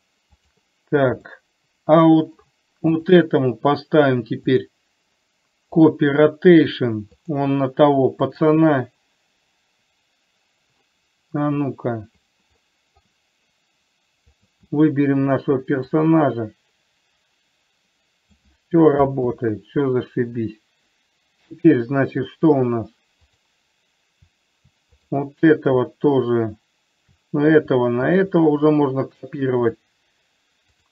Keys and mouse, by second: 0.7 click, 1.6-2.7 middle drag, 3.2 click, 4.7-6.4 drag, 7.5 click, 12.9-13.4 middle drag, 14.6 click, 16.5-18.7 drag, 19.6 ctrl+z, 22.0 click, 28.4 shift+click.